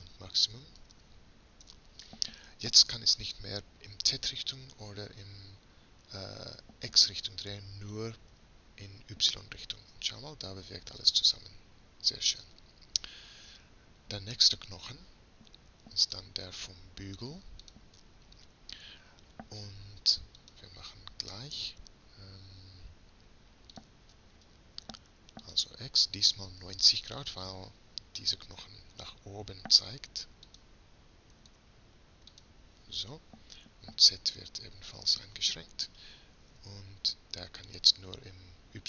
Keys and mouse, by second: 8.3 r, 13.6-16.4 middle drag, 16.4-19.6 drag, 20.7-22.8 drag, 25.8-29.0 drag, 30.5-32.4 drag, 34.9-36.2 drag, 36.5 r.